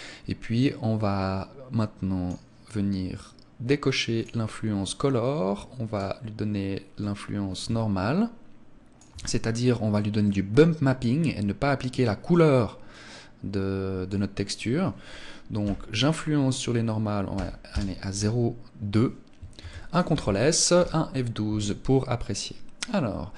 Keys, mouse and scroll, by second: 0.4 click, 4.0 click, 5.8 click, 9.1 click, 19.4 ctrl+s.